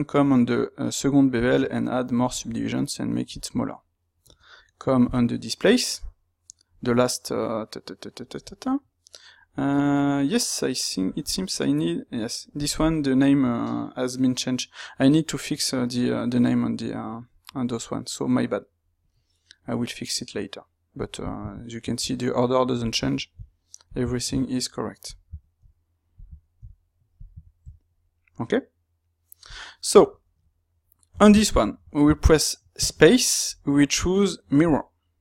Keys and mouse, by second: 29.7-35.2 middle drag.